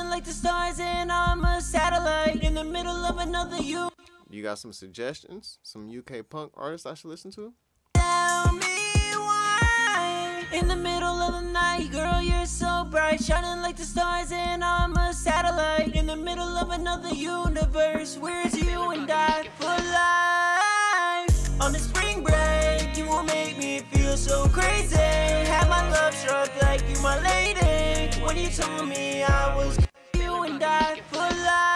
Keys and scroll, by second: 1.8-2.7 typing, 2.7 ctrl+super+w, 3.7 super+s, 13.8-16.3 typing, 29.1 space, 29.3 space.